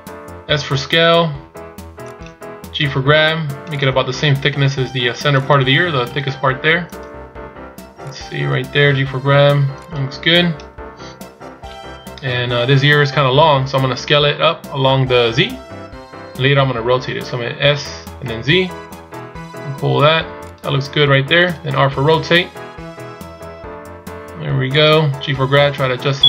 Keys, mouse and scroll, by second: 3.2 g, 4.8 s.